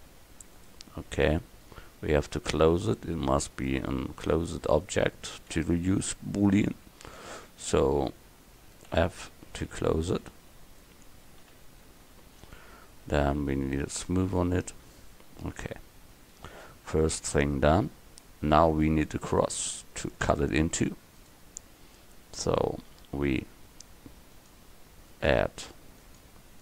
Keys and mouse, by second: 3.8 Tab, 8.9 f, 10.1 Tab, 11.5 KP_1, 13.9-15.9 drag, 17.9 a.